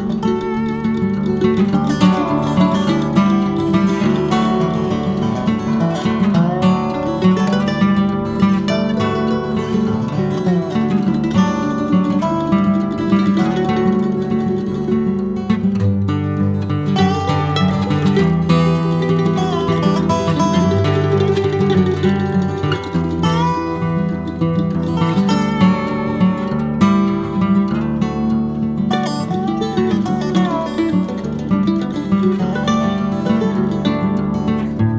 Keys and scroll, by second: 0.9-1.8 typing, 2.4 Escape, 2.6 Escape, 2.9 e, 3.0 space, 3.4 Escape, 3.4 Escape, 3.8 e, 3.9 space, 4.9 Escape, 5.0 Escape, 5.2 Escape, 6.7 Escape, 6.8-7.8 typing, 9.6 ctrl+z, 9.9 Escape, 10.0 ctrl+z, 10.2-11.1 typing, 11.3 Escape, 11.4 Escape, 17.8 Escape, 18.3-19.2 typing, 20.4 typing, 20.6 Return, 20.8 Escape, 20.9 Escape, 21.0 Escape, 25.0 Escape, 27.3 Escape, 28.2-29.0 typing, 29.9 Escape, 30.5 Escape, 30.5 b, 32.0 space, 33.0 BackSpace.